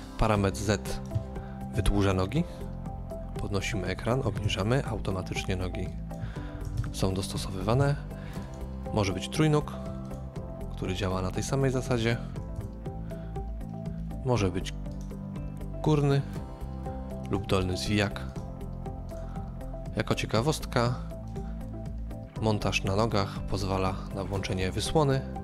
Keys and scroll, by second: 1.6 KP_2, 1.7 Return, 4.2 KP_1, 4.4 Return, 6.1-6.8 typing, 12.2-12.9 typing.